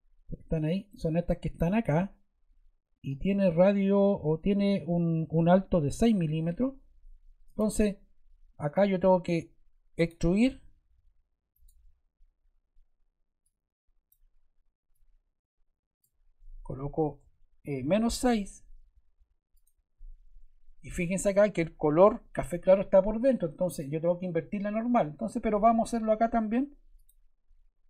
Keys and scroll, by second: 17.1 -, 17.6 6.